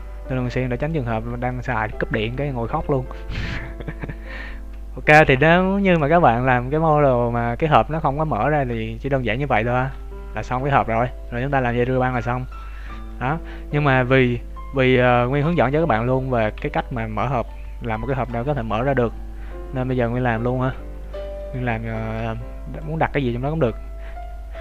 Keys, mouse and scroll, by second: 0.2 scroll up 2, 0.7 click, 1.1 scroll down 1, 1.5 shift+middle click, 3.8 z, 5.1 z, 5.3 Tab, 5.7-8.1 scroll down 1, 8.1 scroll down 2, 8.7 middle click, 9.3-9.9 scroll down 3, 9.6 shift+middle click, 9.9 middle click, 13.1 KP_3, 13.5 KP_1, 13.8-14.5 scroll up 3, 14.0 Tab, 15.9 scroll up 1, 17.4 z, 17.7-18.1 scroll down 2, 18.1 shift+middle click, 20.9 right click, 22.0 b.